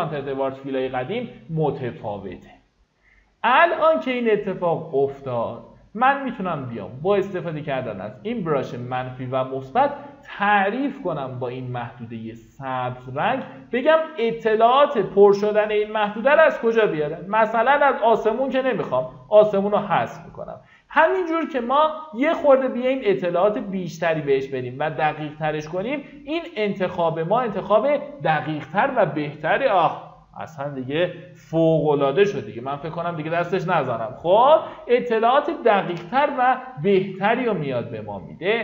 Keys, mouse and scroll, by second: 17.4-26.0 drag.